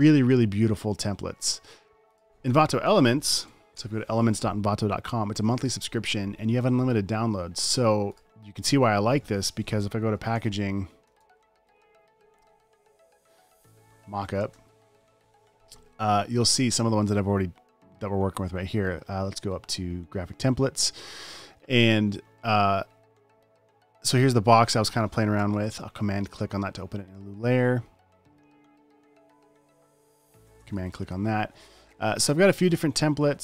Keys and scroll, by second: 3.7-4.6 typing, 10.2-12.0 typing, 13.2 Down, 13.6 Right, 14.1-15.7 typing.